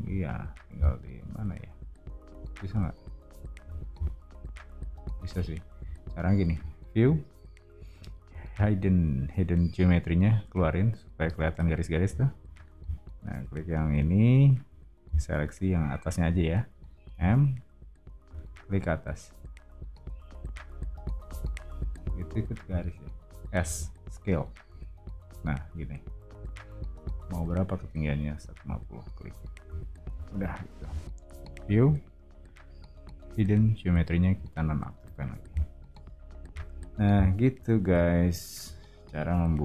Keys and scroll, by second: 3.6 o, 12.5 space, 17.2 m, 22.6 Escape, 23.6 s, 29.2 space, 30.1 Escape, 35.0 o.